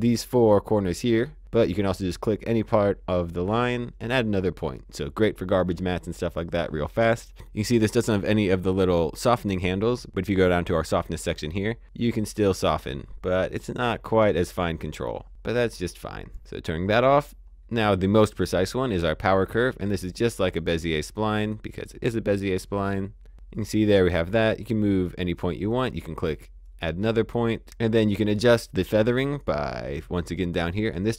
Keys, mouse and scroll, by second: 3.5 click, 10.8 click, 17.6-18.9 scroll down 1, 18.9 click, 25.0 click, 29.1 click.